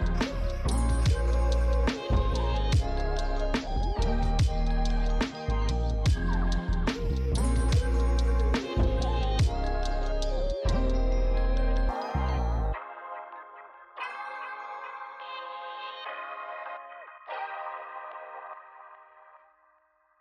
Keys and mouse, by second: 0.8 Tab, 0.8-6.3 typing, 1.8 click, 2.3 click, 2.6 click, 4.1 click, 5.1 click, 6.1 click, 6.6 click, 11.4 Tab, 11.6 alt+click, 11.9 f, 12.0 click, 12.1 Tab, 12.2 click, 15.9 click.